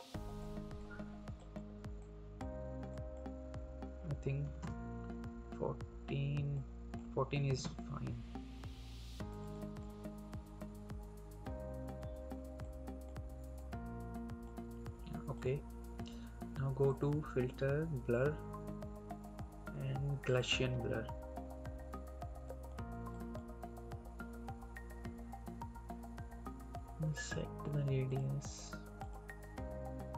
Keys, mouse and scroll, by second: 6.7 click, 10.4 Up, 12.5 click, 20.3 click, 27.1 click.